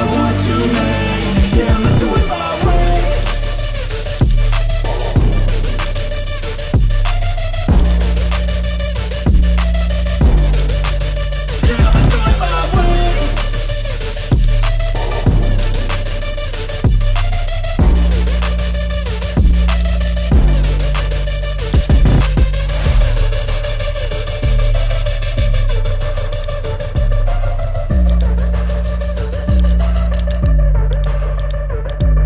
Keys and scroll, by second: 13.0 ctrl+z, 17.3 ctrl+i, 23.4 ctrl+z.